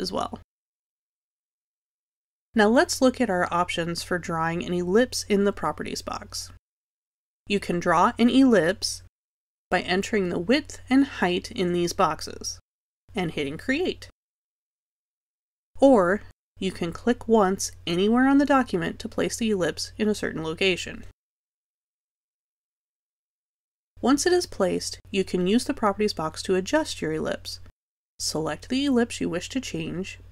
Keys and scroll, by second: 13.3 4, 17.3 z.